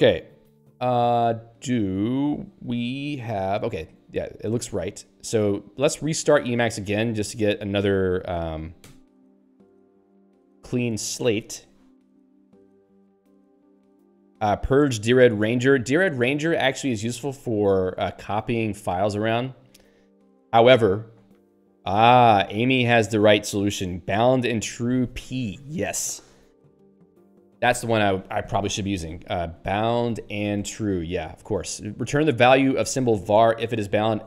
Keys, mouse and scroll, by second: 6.5 ctrl+s.